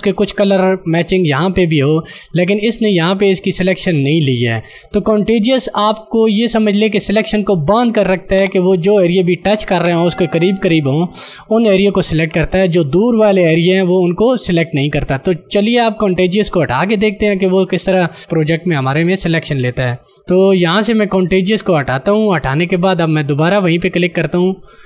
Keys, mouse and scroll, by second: 17.9 d, 22.7 click.